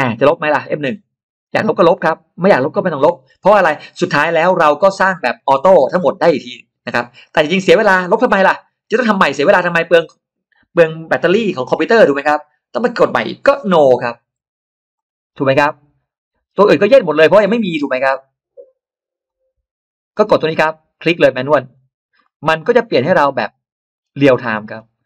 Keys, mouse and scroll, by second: 14.8 click, 16.7 click, 17.4 click, 17.8 click, 18.4 click, 19.1 click, 21.6 click, 22.1 middle click, 22.5-23.1 scroll up 2, 22.8 middle click, 23.8 scroll down 2, 24.5-24.9 scroll down 1, 24.9 middle click.